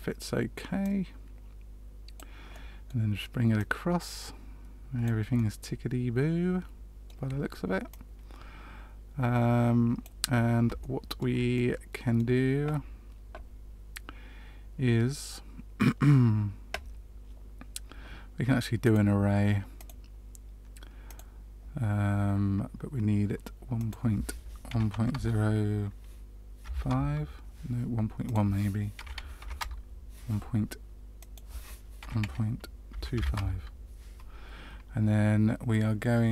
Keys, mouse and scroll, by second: 0.7 click, 2.5 middle click, 3.5 click, 5.3 middle click, 7.8 click, 10.7 shift+middle click, 11.5 middle click, 18.8 click, 19.7 click, 23.7 click, 28.2 click, 31.1 click.